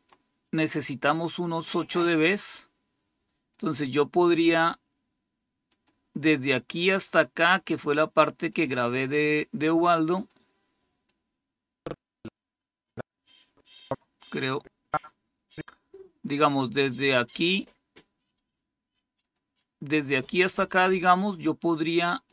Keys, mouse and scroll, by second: 1.5 click, 3.4 click, 5.6 click, 8.4 click, 10.0 click, 11.0-16.3 drag, 17.4 click, 19.1 click, 21.1 click, 22.2 click.